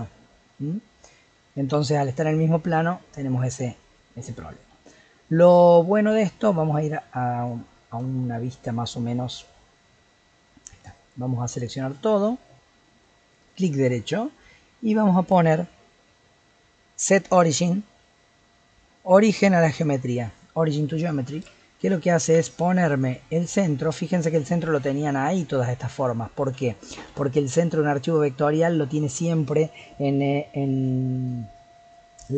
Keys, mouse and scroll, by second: 1.7-6.3 middle drag, 6.3-7.7 scroll down 10, 7.7-8.0 scroll down 1, 8.0 KP_1, 8.8 scroll down 1, 9.1-9.9 middle drag, 9.9-11.1 scroll up 6, 11.1 click, 12.1-12.5 scroll down 4, 12.5-13.5 middle drag, 13.5-16.6 right drag, 22.1-23.3 scroll up 8, 26.8-27.2 middle drag, 27.2-27.6 scroll down 2, 27.6-30.7 middle drag.